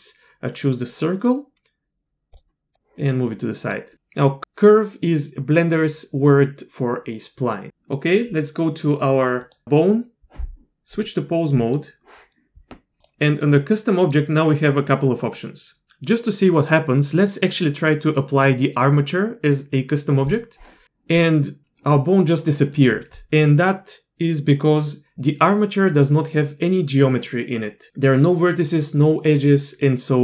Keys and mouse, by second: 2.8 click, 9.4 click, 10.9-11.7 drag, 13.0 click, 14.0-15.8 drag, 17.1-20.3 drag.